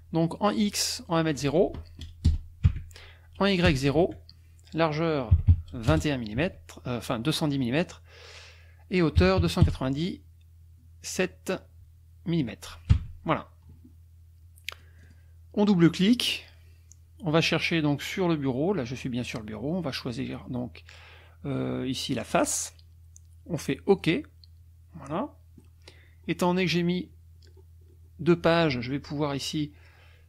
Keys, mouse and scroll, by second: 1.1 click, 2.2 KP_0, 2.6 Tab, 3.7 KP_0, 4.0 Tab, 5.4 KP_2, 5.5 KP_1, 5.9 KP_0, 6.4 Tab, 9.2 KP_2, 9.4 KP_9, 9.6 KP_7, 12.9 Tab, 14.8 click, 22.2 click, 23.9 click, 25.1 middle click, 26.0-26.3 scroll down 2, 26.5-28.5 scroll down 10.